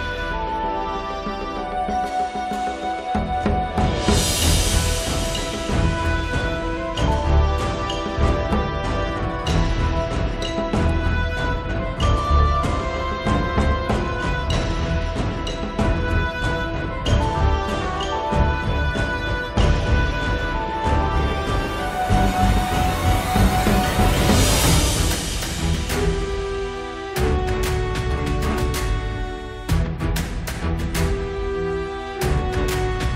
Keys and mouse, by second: 0.9-2.8 drag, 0.9-3.0 right drag, 3.8-5.7 middle drag, 4.5-5.6 drag, 4.5 right click, 5.7 click, 6.5 click, 7.4 click, 8.8 middle click, 9.4 click, 10.3 middle click, 10.5-12.6 drag, 12.6 middle click, 12.8-15.0 drag, 15.0 middle click, 15.1-16.3 drag, 15.1-16.3 right drag, 16.3 middle click, 16.4-20.3 drag, 16.4 right click, 17.1-18.2 right drag, 21.7 middle click, 22.2-25.6 drag, 25.2-30.9 middle drag, 29.6-33.1 drag, 29.6-30.9 right drag, 31.3 middle click, 31.3 right click, 32.1-33.1 middle drag, 32.1-33.1 right drag.